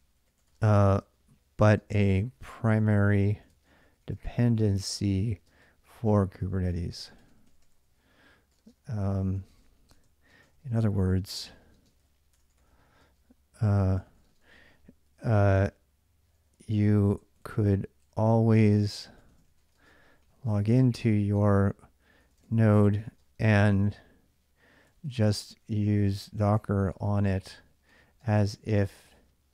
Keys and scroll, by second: 0.0-28.7 typing.